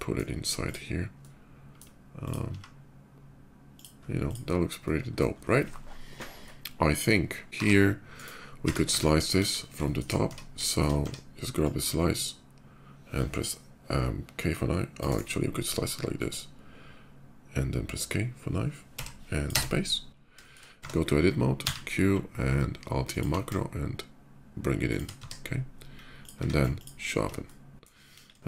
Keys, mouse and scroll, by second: 0.2 click, 0.8-1.5 middle drag, 1.9 click, 2.3 s, 3.1 s, 3.5 click, 3.9 click, 4.5-4.9 middle drag, 6.0-7.4 middle drag, 7.4 ctrl+r, 7.9 right click, 8.5 Tab, 9.1 KP_5, 9.6 middle click, 10.0 Tab, 10.4 middle click, 10.8 Tab, 11.4-14.8 drag, 15.9-19.2 drag, 18.7 k, 19.2 k, 19.4 space, 20.2 shift+middle drag, 20.6 Tab, 21.4 q, 22.0 q, 22.9 click, 24.7 shift+click, 24.7-25.8 shift+right drag, 24.9 Tab, 25.3-26.0 drag, 26.1 q, 26.5 click, 27.2-27.6 middle drag, 27.7 middle drag, 27.9 KP_5, 28.2 middle drag.